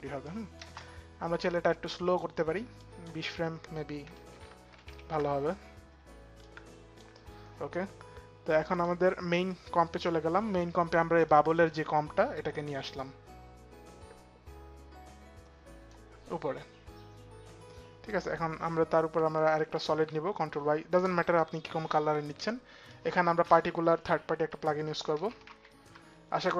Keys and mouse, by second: 0.0 click, 0.6 space, 2.5 click, 4.0 Home, 4.0 click, 4.0 space, 4.3 shift+Page_Down, 5.7 Home, 5.7 shift+Page_Down, 5.7 click, 8.4 click, 10.9 click, 19.5 ctrl+y, 20.7 Return, 22.5 click, 23.8-25.6 typing.